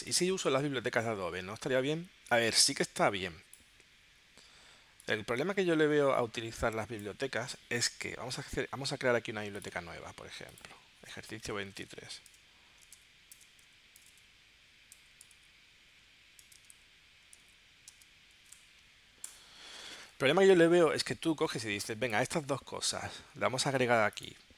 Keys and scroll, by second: 11.4-19.0 typing, 19.2 Return.